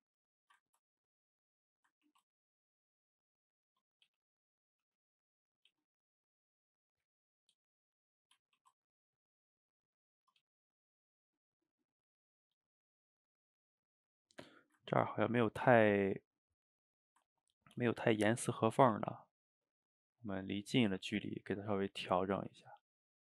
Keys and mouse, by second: 0.4 shift+right click, 0.7 ctrl+middle click, 1.4 click, 1.6 middle click, 2.1 ctrl+t, 4.1 g, 4.7 click, 4.9 g, 5.6 click, 5.7 g, 6.7 click, 6.8 g, 7.3 click, 7.4 g, 8.0 middle click, 8.6 ctrl+t, 10.4 g, 11.1-11.7 middle drag, 11.7 click, 11.9-12.4 middle drag, 12.4 g, 13.4-14.6 middle drag, 14.6 shift+right click, 14.9-16.7 ctrl+middle drag, 16.7 click, 16.9-17.6 middle drag, 17.6 ctrl+t, 19.0 g, 20.6-22.2 middle drag, 22.2 click, 22.4 g, 22.9-23.2 middle drag.